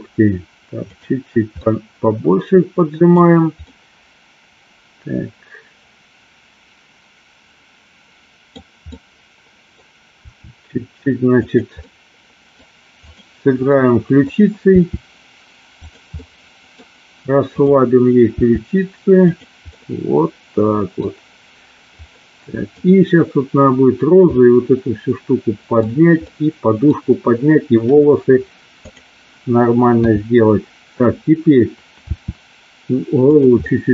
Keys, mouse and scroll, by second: 0.9 click, 1.7-3.2 middle drag, 3.8-8.6 middle drag, 9.1-9.8 middle drag, 10.3 r, 11.4 click, 11.8 middle click, 13.1 click, 13.8 middle click, 14.8 r, 15.9 click, 16.2 middle click, 17.5 click, 18.3 r, 19.3 click, 19.8-20.9 middle drag, 22.2 middle click, 24.4-25.8 middle drag, 26.4 middle click, 28.9 click, 30.1 KP_7, 32.2 r, 33.3 click, 33.7-33.9 middle drag.